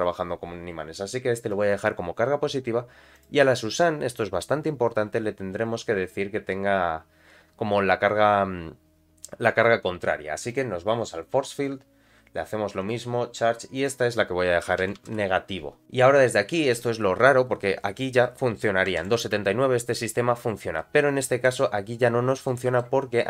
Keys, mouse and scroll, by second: 3.1 click, 10.5 click, 11.5-12.9 drag, 13.7-15.8 drag, 19.0 shift+Left, 19.2 space, 20.8 middle click, 22.4 middle click.